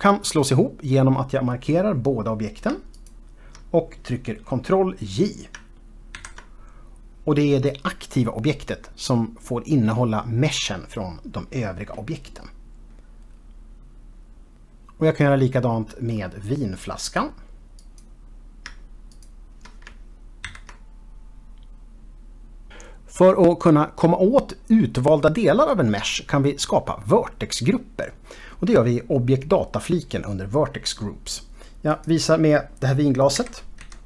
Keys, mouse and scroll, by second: 3.1 shift+click, 6.3 ctrl+j, 17.2 click, 18.0 click, 19.3 shift+click, 20.7 ctrl+j, 32.3 click, 33.7 KP_1.